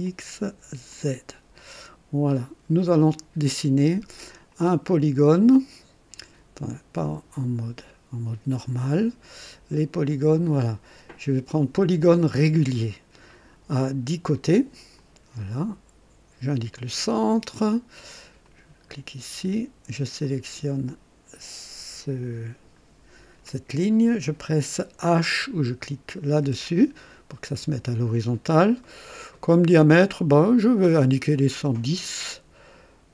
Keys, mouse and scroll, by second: 0.0 click, 0.9 click, 1.6-2.5 right drag, 7.0 click, 10.2 click, 12.1 click, 14.9 click, 16.5 click, 18.4 click, 19.0 right click, 20.2 click, 26.4 h, 28.8 right click, 29.8 click, 30.7 click.